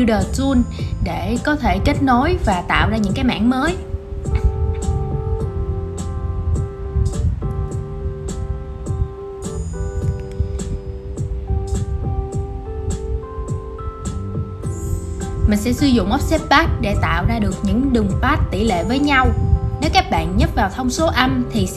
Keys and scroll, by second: 2.5 super+z, 4.2 super+x, 6.1 shift+super+v, 8.6 super+8, 11.1 super+a, 11.3 super+g.